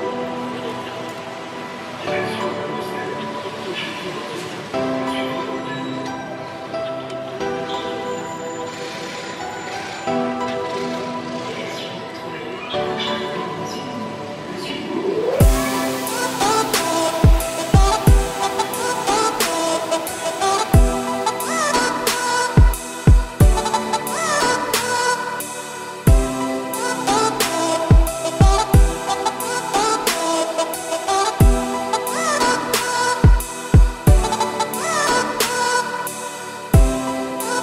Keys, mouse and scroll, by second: 3.9 click, 5.2 m, 6.3-6.7 scroll down 1, 6.7 a, 7.5 click, 8.3 3, 8.4 click, 8.6 scroll up 1, 9.3 i, 12.9 a, 13.8 shift+n, 14.3 click, 14.8-15.2 scroll up 2, 15.2 i, 16.2 scroll down 3, 16.5 `, 16.8 scroll down 2, 16.9 middle click, 17.3 z, 18.1 1, 19.4 i, 25.9 e, 27.2 2, 27.4-28.6 middle drag, 28.6 3, 28.8 middle click, 29.4 click, 30.0 middle click, 30.6 scroll up 2, 31.5 i, 32.6 `, 33.3 scroll up 1, 33.8 i, 37.3-37.6 scroll down 4.